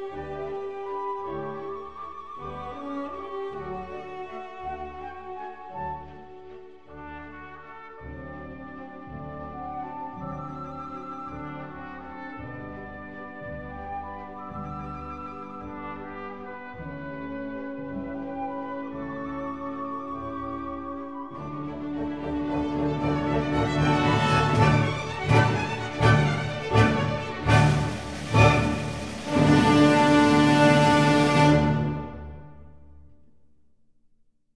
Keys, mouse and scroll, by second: 2.5-4.2 drag, 6.1-7.8 drag, 9.4-11.2 drag, 13.3-15.0 drag, 17.7-18.8 middle drag, 19.5-20.9 middle drag, 20.9-22.6 drag, 24.1-25.9 drag, 27.2-29.8 middle drag, 29.8 z, 30.9 z.